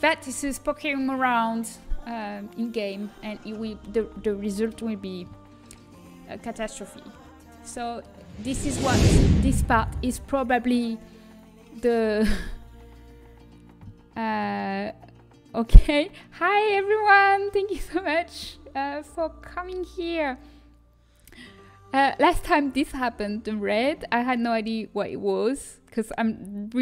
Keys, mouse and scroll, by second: 6.2-9.1 middle drag.